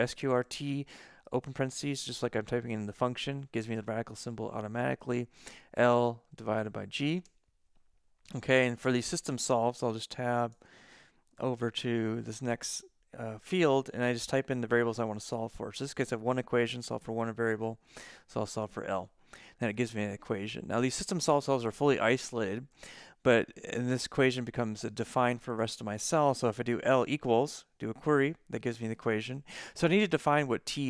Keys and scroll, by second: 0.0-1.1 typing, 5.7 shift+l, 6.4 /, 7.3 g, 9.6 Tab, 10.1 Tab, 10.5 Tab, 11.4 Tab, 18.1 shift+l, 26.9 shift+l, 27.8 =.